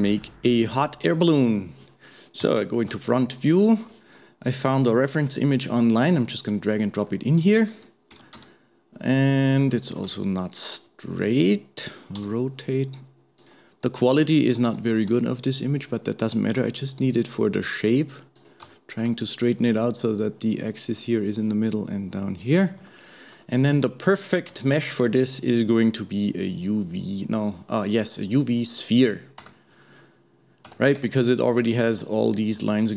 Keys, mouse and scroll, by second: 0.0-2.4 middle drag, 2.4 KP_1, 3.2-6.2 shift+middle drag, 7.1-8.1 shift+middle drag, 8.1 g, 18.7 shift+middle click, 19.2-20.5 scroll up 2, 22.9-24.6 shift+middle drag, 24.6 shift+a, 29.4 Tab, 30.7 Tab.